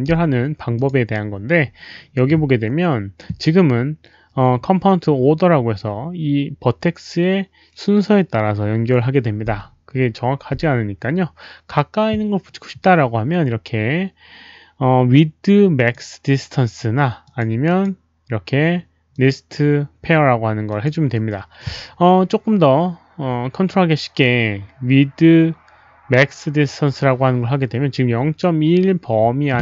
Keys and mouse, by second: 0.7 click, 1.3 click, 4.4 click, 15.7 click, 17.2 click, 17.6 click, 19.1 click, 20.6 click, 21.5 click, 26.5 click.